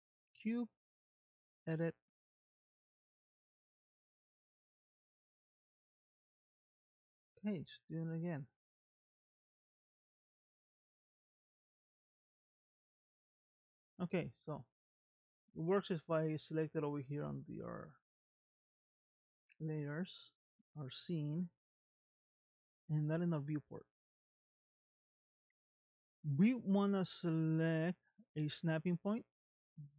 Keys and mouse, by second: 1.1 Tab, 2.8 Tab, 4.1 click, 5.3 Tab, 6.0 Tab, 6.4 click, 7.5 click, 8.3 click, 9.6 click, 11.4 Tab, 12.9 middle click, 19.6 click, 22.8 shift+middle click, 25.4 middle click, 28.2 click.